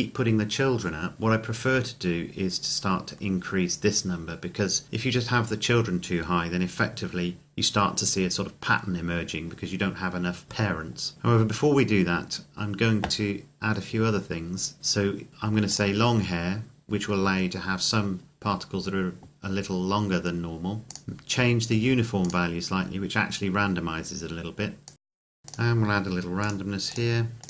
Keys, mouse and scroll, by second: 1.2-2.3 scroll up 1, 2.3-3.0 scroll down 1, 3.0-3.4 scroll up 1, 4.6-6.8 scroll down 1, 11.1-12.3 scroll down 1, 15.7 click, 21.0 click, 24.9 click, 25.2 KP_Enter, 25.7 click.